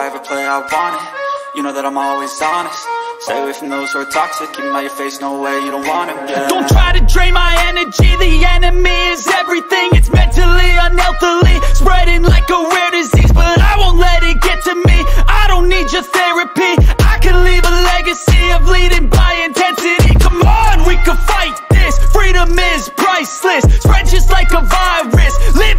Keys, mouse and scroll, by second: 3.0 click, 5.0 ctrl+c, 5.5-6.3 drag, 6.3 ctrl+v, 7.6-8.9 drag, 9.0 ctrl+v, 9.6-9.9 drag, 10.2-10.8 drag, 11.4 click, 12.8-13.5 drag, 13.7 ctrl+c, 14.4 ctrl+click, 15.1 ctrl+v, 15.7-16.3 ctrl+drag, 17.1-17.5 drag, 17.7-20.1 drag, 20.6 ctrl+click, 22.1-23.7 drag, 25.0-25.7 drag.